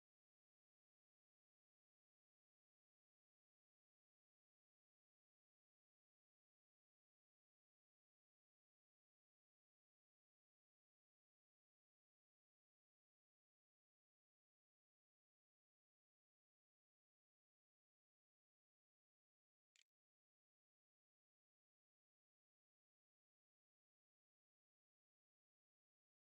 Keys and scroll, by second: 14.2-15.5 typing, 19.6 Return.